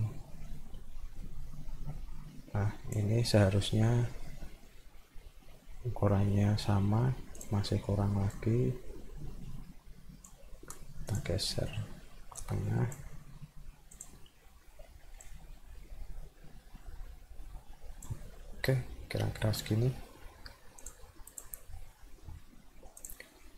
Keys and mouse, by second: 4.5 middle click, 7.4 click, 8.3-10.3 drag, 11.1 click, 11.6 middle click, 12.4 click, 13.9 click, 15.3-18.0 drag, 19.2 middle click, 20.8 click, 21.3 click, 23.0 click, 23.3 middle click.